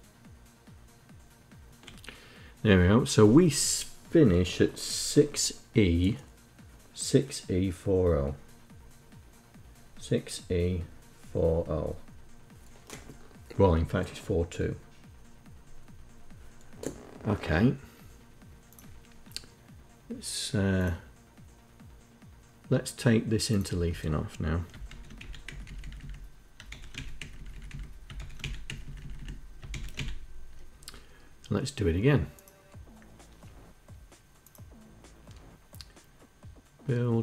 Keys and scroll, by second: 23.4 Left, 24.6 shift+End, 24.9 Delete, 25.2 Down, 25.4 Down, 25.5 Down, 25.7 Down, 26.4 shift+End, 26.7 Delete, 26.8 Down, 27.1 Down, 27.9 shift+End, 28.1 Delete, 28.4 Down, 28.7 Down, 28.9 Down, 29.4 shift+End.